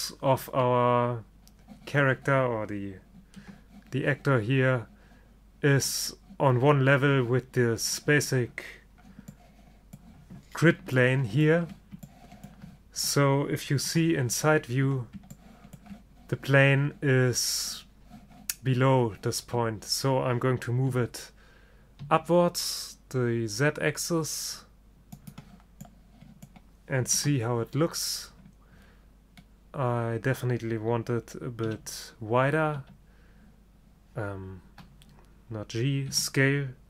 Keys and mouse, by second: 3.5 KP_0, 14.0 KP_3, 21.0 g, 22.1-26.2 middle drag, 27.2 KP_0, 31.8 g, 36.2 s.